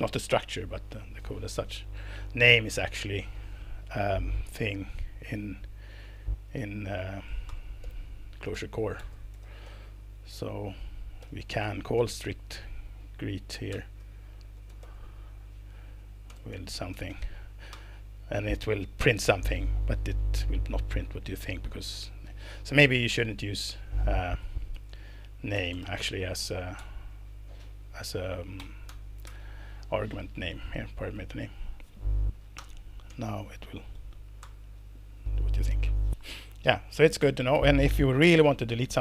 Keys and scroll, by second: 6.9 Return, 7.5 Return, 7.8-17.6 typing, 17.7 alt+Return, 24.7 Left, 24.9 Right, 25.1 Right, 25.5 BackSpace, 25.7 BackSpace, 25.8 s, 26.8 Escape, 28.6 s, 28.9 Escape, 29.3 Escape, 32.6 alt+Return, 33.1 Escape, 33.4 Down, 33.9 Down, 34.4 alt+Return, 35.3 Escape.